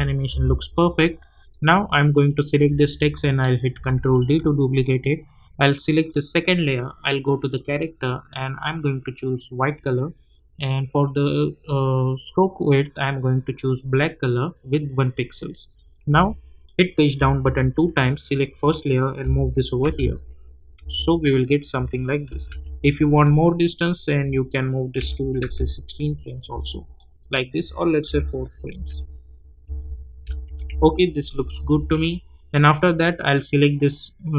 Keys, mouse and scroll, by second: 1.5 click, 3.7 ctrl+d, 4.7 click, 13.6 click, 15.9 click, 17.1 Page_Down, 18.4 click, 19.2 [, 19.8 space, 21.5 click, 22.3 =, 22.5 =, 24.1 click, 25.0 [, 25.5 space, 26.9 click, 28.1 [, 29.6-31.4 typing, 31.2 click, 33.4 click.